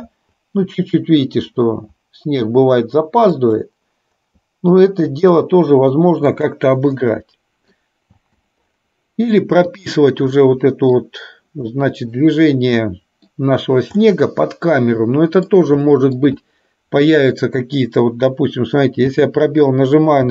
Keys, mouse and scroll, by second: 6.4 click, 7.0-7.9 middle drag, 8.2 space, 9.7 click, 10.4-11.0 middle drag, 11.8-13.5 middle drag, 14.0-15.5 middle drag, 15.9 middle click, 16.5-17.2 shift+middle drag, 19.0 space.